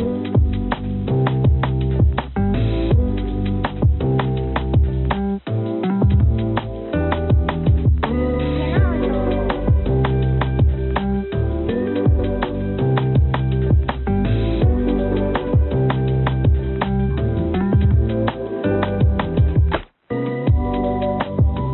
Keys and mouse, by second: 0.4 g, 11.5 space, 12.7 click, 18.3 space, 18.5 space, 18.7 space, 21.4 click.